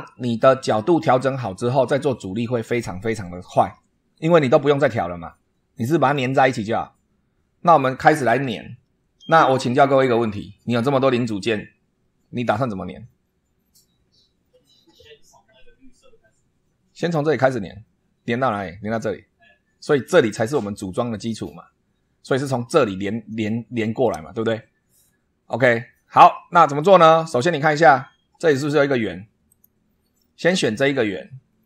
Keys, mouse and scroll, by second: 7.9 scroll down 2, 9.6 shift+middle click, 27.5-27.8 scroll up 2, 29.4 click, 31.4-31.6 scroll down 2.